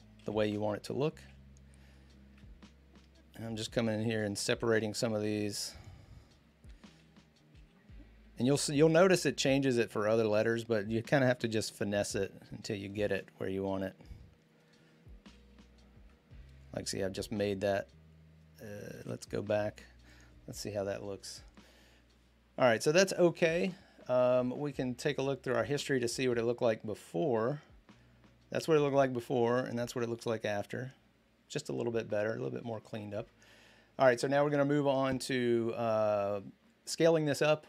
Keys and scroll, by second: 6.7 alt+Right, 10.6 alt+Right, 15.0 alt+Left, 18.8 alt+Right.